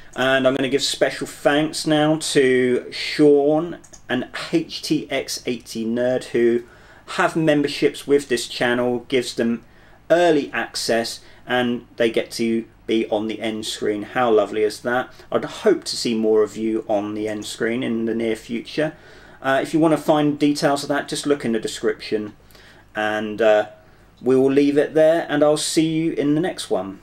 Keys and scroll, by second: 3.0 typing.